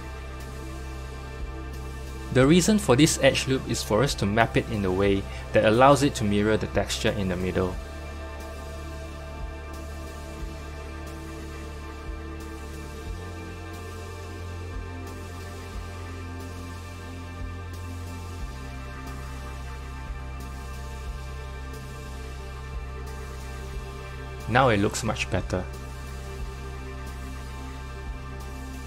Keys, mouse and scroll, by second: 2.9 3, 3.7 click, 7.8 g, 11.7 click, 12.5 g, 16.5 click, 17.1 g, 20.8 Tab, 21.8 click, 23.4 click.